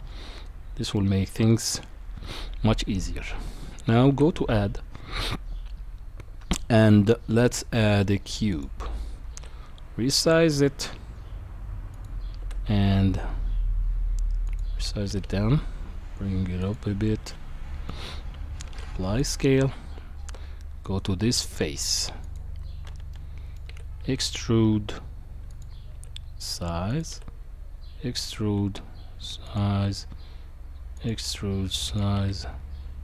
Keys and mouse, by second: 0.9-1.7 middle drag, 4.1 shift+a, 9.3 s, 15.1 g, 17.3-17.9 middle drag, 18.7 ctrl+a, 19.7 Tab, 22.2 click, 23.1 middle click, 23.7 e, 25.9 s, 27.1 e, 28.4 s, 29.7 e, 31.1 s, 32.2 e.